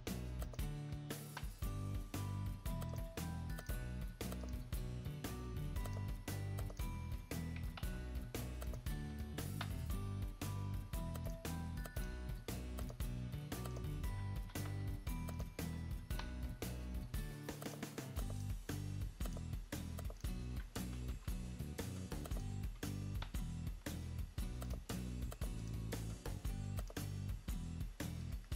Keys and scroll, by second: 1.0 ctrl+v, 1.9 ctrl+v, 7.2 ctrl+a, 7.8 ctrl+c, 9.5 ctrl+v, 14.3 ctrl+a, 14.7 ctrl+c, 16.0 ctrl+v, 18.2 ctrl+v, 20.8 ctrl+a, 21.1 ctrl+c, 23.0 ctrl+v, 23.5 ctrl+v.